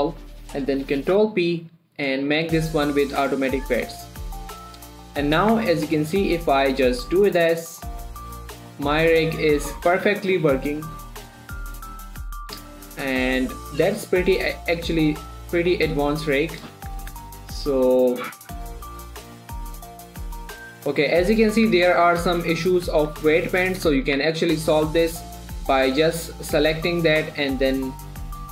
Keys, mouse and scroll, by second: 0.1 a, 1.5 ctrl+p, 3.4 click, 5.9 Tab, 6.4 click, 6.6 g, 7.3 right click, 7.7 middle click, 7.9 scroll down 1, 8.0 shift+middle click, 8.4 scroll up 1, 8.6 g, 9.5 right click, 9.7 middle click, 10.9 click, 11.2 g, 11.9 right click, 12.1 middle click, 12.5 click, 12.7 middle click, 13.0 g, 13.8 right click, 14.4 click, 14.7 g, 15.1 click, 15.9 g, 16.9 right click, 17.2 ctrl+z, 17.9 middle click, 18.2 shift+middle click, 18.8 scroll up 1, 19.0 click, 19.1-22.5 typing, 19.2 right click, 19.3 click, 19.5 right click, 19.5 click, 19.8 right click, 19.9 click, 20.2 click, 20.3 right click, 20.4 click, 20.5 shift+middle click, 20.6 click, 21.0 right click, 21.3 middle click, 21.7 click, 22.3 scroll up 1, 23.1 right click, 23.7 shift+middle click, 23.9 scroll up 1, 24.2 middle click, 24.5 Tab, 24.8 middle click, 25.3 shift+click.